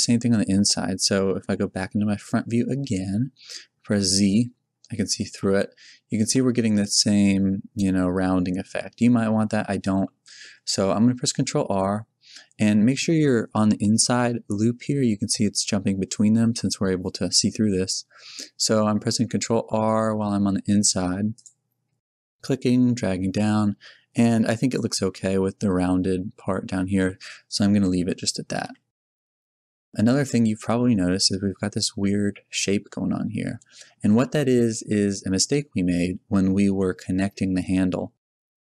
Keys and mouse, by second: 1.4 KP_1, 3.0 z, 5.2 Tab, 6.2 Tab, 9.0 Tab, 9.5 a, 11.2 ctrl+r, 24.8 click, 27.7 z, 28.6 Tab, 32.3 middle click, 34.3-36.5 middle drag, 37.7-38.7 middle drag.